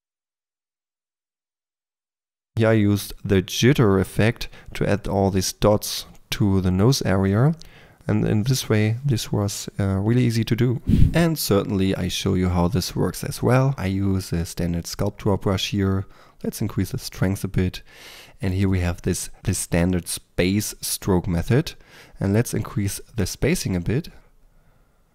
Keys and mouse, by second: 0.0-2.3 typing, 0.5 drag, 2.2 click, 2.4 click, 3.9 click, 4.5-5.4 typing, 6.4 click, 7.5 click, 8.5 middle click, 8.6 click, 8.9 f, 9.0 f, 9.7 f, 10.2 f, 11.9 f, 24.1 ctrl+z.